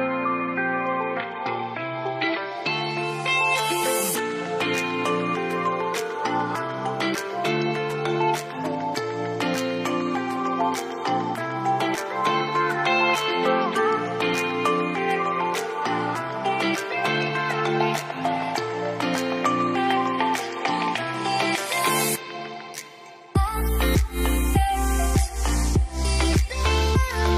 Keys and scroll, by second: 6.5 ctrl+d, 16.5 typing, 16.6 Return, 20.9-22.7 typing.